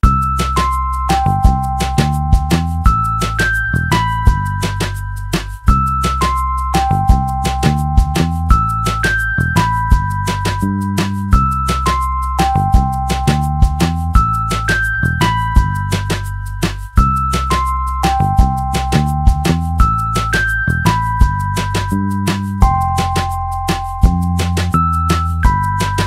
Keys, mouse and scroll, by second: 1.0 click, 2.0 click, 2.4 middle click, 3.4 middle click, 5.7 click, 6.0 click, 7.5 click, 9.6 click, 10.8 click, 11.6 middle click, 16.6 middle click, 16.6 scroll up 1, 17.9 scroll up 1, 18.0 middle click, 18.8 click, 19.9 click, 21.3 click, 24.1 click.